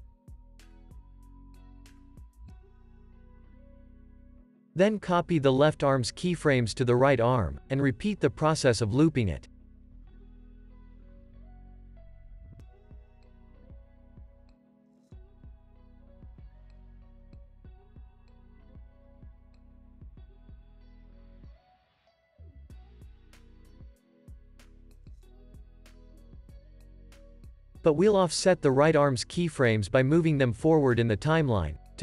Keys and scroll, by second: 0.1 space, 3.9 space, 4.1 super+s, 6.4 super+c, 11.2 super+s, 11.9 super+v, 12.6 space, 16.7 space, 17.0 super+s, 22.5 super+v, 23.3 super+s, 30.0 alt+w, 31.4 space.